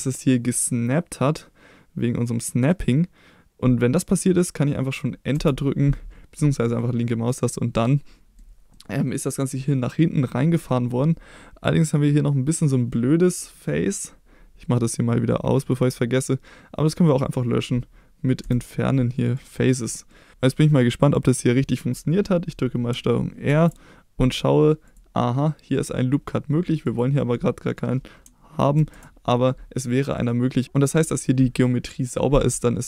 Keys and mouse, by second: 5.3 Return, 6.8 middle click, 7.8 middle click, 8.7 middle click, 10.2 middle click, 15.6 click, 17.1 click, 18.4 Delete, 20.1 middle click, 20.5 middle click, 23.5 ctrl+r, 26.8 click, 28.8 ctrl+z, 30.0 middle click.